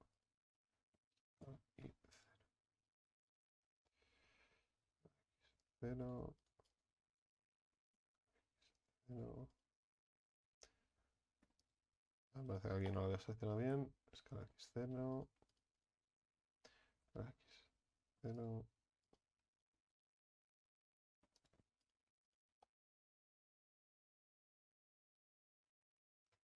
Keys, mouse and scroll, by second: 1.0 s, 2.9 right click, 4.7 s, 6.0 right click, 7.8 s, 9.1 right click, 10.8 s, 12.1 right click, 13.6 s, 15.1 right click, 16.9 s, 19.0 right click, 20.7 s, 21.8 right click, 23.4 s.